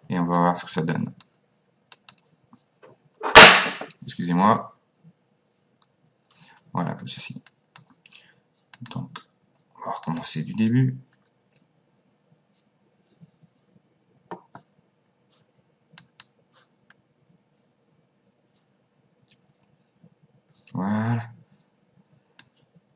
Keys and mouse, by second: 0.9 click, 7.5 click, 8.8 click, 10.1 click, 16.0 click, 22.4 click.